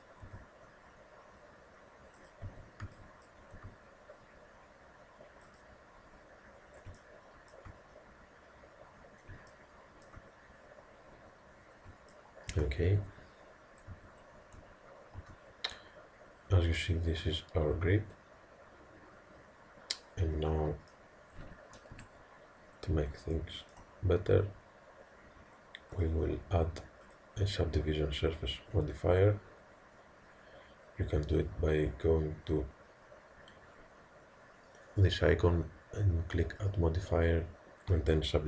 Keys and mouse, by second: 0.3 g, 2.5 a, 2.9 b, 3.6 g, 7.0-13.9 middle drag, 13.9 a, 14.6 Tab, 15.2 z, 15.8-17.3 middle drag, 21.9 KP_1, 23.3-26.0 middle drag, 26.0-28.9 drag.